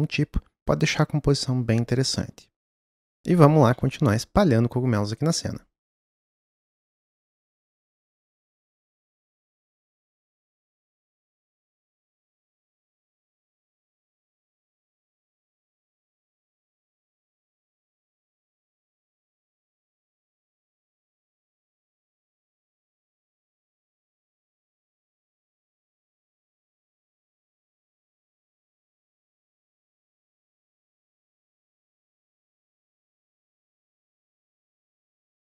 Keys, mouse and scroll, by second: 6.2 click, 6.3-6.8 scroll down 3, 7.1 shift+middle click, 7.4 alt+d, 8.3 click, 8.5 scroll down 2, 8.8 click, 9.5 click, 10.4 s, 10.9 g, 11.3 s, 14.6 s, 15.3 g, 16.5 scroll down 3, 16.6 middle click, 17.1 alt+d, 17.4-18.6 drag, 18.6 middle click, 20.0 click, 20.6 click, 21.1 click, 22.6-24.6 typing, 25.1 click, 25.8 s, 26.6 g, 27.1 s, 27.9 click, 28.8 click, 30.5 Left, 30.7 g, 31.3 s, 31.9 g, 32.5 Left, 32.9 Left, 33.1 s, 33.7 g, 35.0 Left.